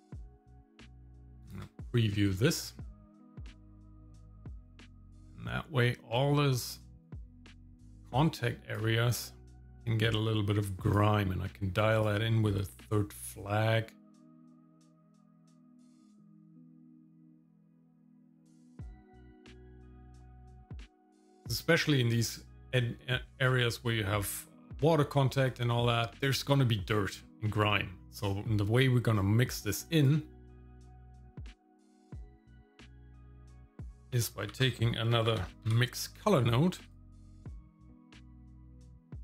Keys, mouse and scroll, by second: 0.4 middle click, 1.5 ctrl+shift+click, 2.8 middle click, 2.8-3.4 scroll down 1, 3.6-7.1 drag, 8.1 click, 9.5-10.9 drag, 12.0 click, 12.8 click, 13.3 click, 18.1 click, 20.1-21.2 drag, 28.0 middle click, 28.0 scroll down 1, 28.8 middle click, 29.1-29.8 scroll down 1, 29.9 click, 30.5-31.6 drag, 31.9 scroll up 1, 33.2 ctrl+shift+click, 34.5 shift+a, 38.1 middle click, 39.1-39.2 drag.